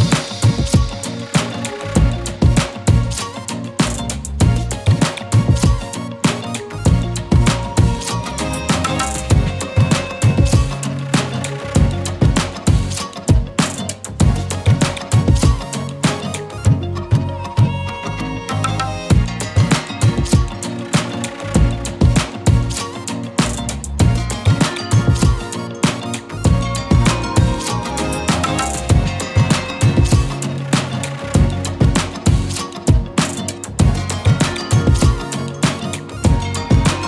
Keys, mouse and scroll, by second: 1.2 click, 7.7 z, 8.0 click, 8.2 space, 8.3 click, 14.5 z, 14.6 click, 14.8 space, 14.9 click, 15.6 right click, 16.5 click, 17.2-18.5 alt+shift+drag, 20.4 right click, 22.8 click, 23.0 scroll down 1, 23.1 z, 23.3 click, 23.5 space, 23.6 click, 25.8-26.7 alt+shift+drag, 30.1-31.0 alt+shift+click, 31.3 z, 31.5 click, 31.6 space, 31.8 click, 32.0 z, 32.2 click, 32.3 space, 32.4-37.0 drag.